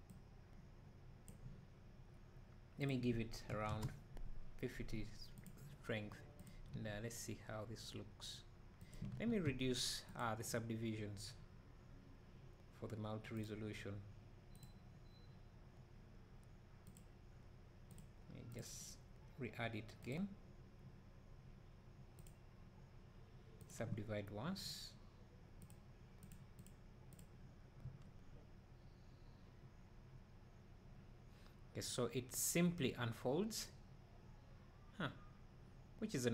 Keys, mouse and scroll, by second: 0.2-5.5 drag, 6.5 click, 6.7 space, 9.7 drag, 17.0-23.7 drag, 26.2 click, 26.6 click, 27.2 click, 27.8 space.